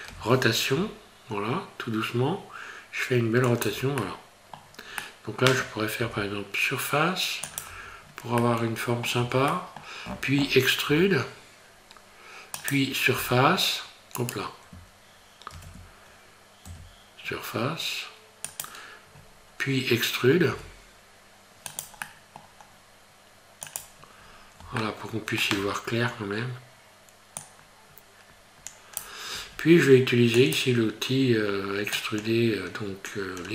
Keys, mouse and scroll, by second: 0.1 r, 4.0 middle click, 4.6-5.0 scroll down 3, 5.0 middle click, 6.0 s, 7.7 Tab, 8.0-8.3 scroll down 3, 8.4 middle click, 9.2 Tab, 9.5 middle click, 10.9 e, 13.2 e, 15.5 ctrl+z, 16.7 s, 19.5 scroll down 1, 20.5 e, 22.1 middle click, 23.7 click, 24.2 scroll up 2, 24.8 shift+middle click, 27.4 click, 30.6 click, 31.9 click.